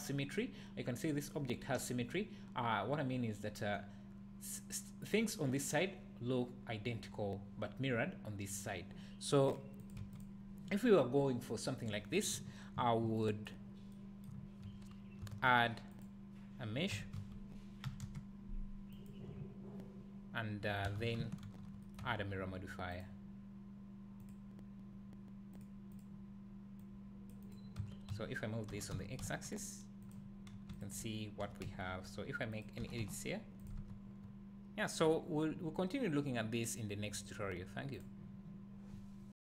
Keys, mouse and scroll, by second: 0.9-3.6 scroll up 2, 9.5 click, 9.8 click, 10.0 x, 10.5 scroll down 1, 12.4 `, 13.7 scroll up 1, 14.4 `, 15.2 shift+a, 16.9 r, 19.1 click, 19.4 `, 20.9 Tab, 21.5 ctrl+r, 21.9 right click, 22.0 Tab, 22.2 Tab, 22.9-25.7 drag, 25.9-30.1 drag, 27.8 Tab, 28.1 a, 28.7 g, 30.7 alt+click, 31.4 e, 32.6 click, 32.8 g, 33.6 click, 33.8 Tab, 34.0 scroll down 1, 34.2 `.